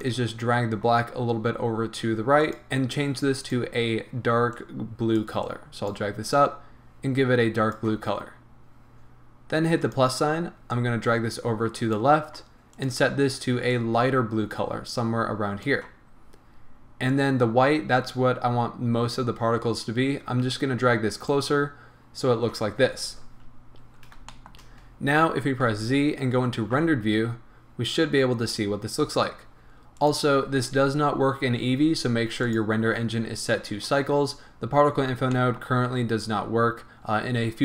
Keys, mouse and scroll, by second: 3.4 click, 9.8 click, 10.8-12.9 drag, 17.1-24.3 drag, 23.3-24.3 scroll up 2, 24.3-30.0 shift+middle drag, 25.6 z, 30.0 click, 32.4-35.3 drag, 34.7-35.3 scroll down 1, 35.3-37.6 middle drag.